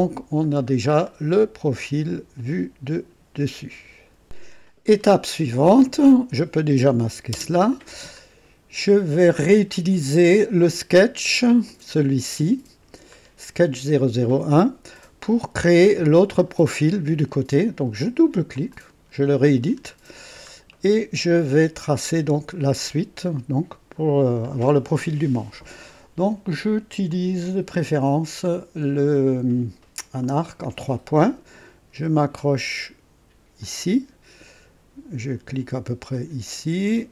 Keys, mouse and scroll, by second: 1.0 click, 3.3 right click, 4.2 click, 4.9-5.3 scroll up 1, 5.6-5.9 scroll down 2, 6.0 right click, 7.3 space, 8.1 scroll up 2, 11.6 click, 13.1 scroll up 2, 18.5 click, 19.7 scroll up 1, 20.2-20.5 scroll down 1, 20.7-21.8 right drag, 27.0 click, 30.2 click, 33.5 click, 36.0 click.